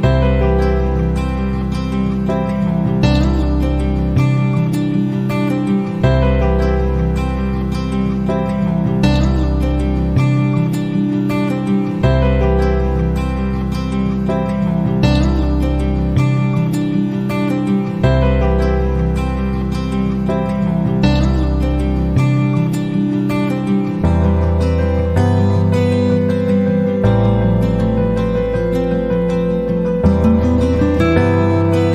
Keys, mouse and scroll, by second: 0.2-1.2 drag, 1.6 ctrl+d, 3.4 click, 4.9-6.5 right drag, 7.2 click, 8.1 click, 9.8 click, 11.2 click, 13.6 click, 14.5 click, 15.5 click, 21.7 click, 24.8 click, 28.1 click, 28.8 click, 30.4 click, 31.7 click.